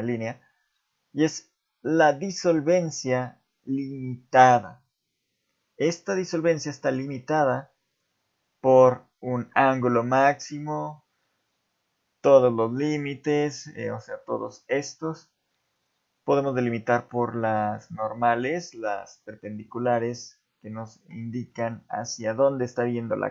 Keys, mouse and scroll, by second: 6.6 click, 7.2 click, 13.9 click, 15.7 click.